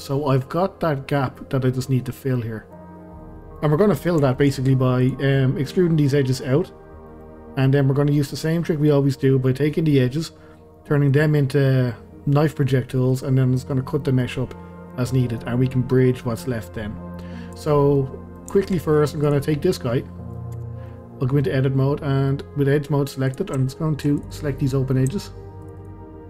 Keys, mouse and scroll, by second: 3.9-4.3 scroll up 1, 4.3-5.0 shift+middle drag, 5.0 click, 5.3-10.5 middle drag, 10.5 scroll down 2, 10.7-17.5 middle drag, 17.5 click, 18.0-19.2 middle drag, 19.2 click, 19.5-20.6 middle drag, 20.6 Tab, 20.8-23.3 middle drag, 23.3 click, 24.2 click, 24.3 click, 24.7-25.6 middle drag, 25.6 shift+click, 25.8 shift+click.